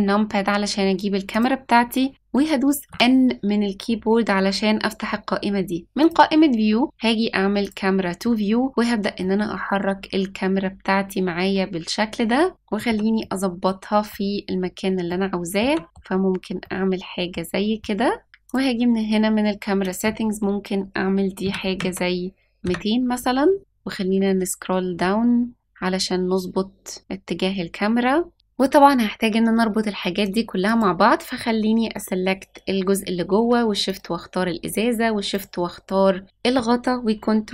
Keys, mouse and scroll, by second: 1.3 click, 2.1 scroll up 1, 2.8 n, 6.0 click, 7.6 click, 9.2-12.9 middle drag, 13.2-14.1 middle drag, 14.6-14.9 scroll down 1, 15.1-15.6 shift+middle drag, 15.8 shift+middle click, 16.6 middle click, 18.4 click, 19.8-22.7 drag, 21.8 KP_0, 23.9 scroll down 1, 24.5-25.2 scroll down 2, 25.6-26.2 scroll down 3, 27.1 scroll down 1, 30.2 click, 30.6 click, 33.8 shift+click, 35.3 shift+click.